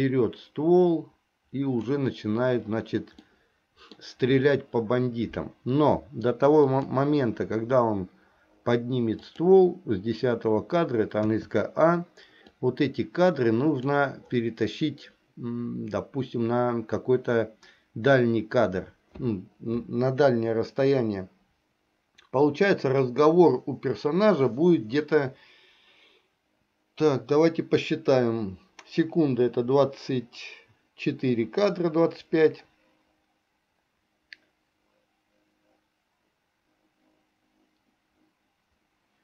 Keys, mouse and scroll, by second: 3.3 middle click, 6.8 click, 9.3 click, 11.3 a, 12.7-13.9 drag.